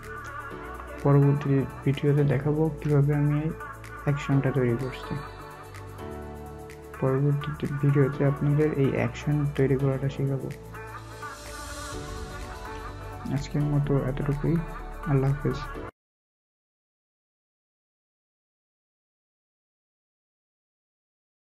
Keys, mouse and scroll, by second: 0.7-1.5 alt+scroll, 1.5 alt+scroll down 1, 2.3 alt+scroll up 1, 11.7 alt+scroll, 11.7-12.2 alt+scroll down 1, 12.2-13.2 alt+scroll up 1.